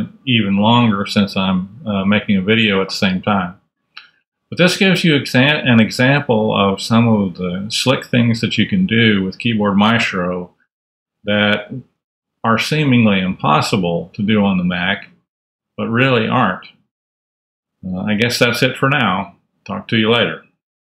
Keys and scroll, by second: 9.0 super+w, 11.6 super+a, 11.6 super+Up.